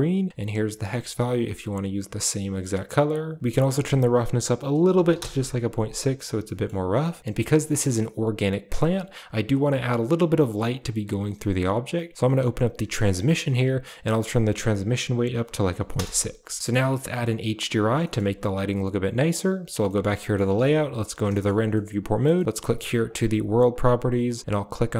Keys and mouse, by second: 3.5-5.1 drag, 7.2 middle click, 13.0 click, 14.0-15.9 drag, 16.6 shift+middle click, 17.0 middle click, 17.9 shift+middle click, 19.2 click, 19.8 middle click, 20.1 shift+middle click, 20.5 z, 21.2 shift+middle drag, 21.6-22.2 middle drag, 22.2 shift+middle drag, 22.9 click, 23.6 click.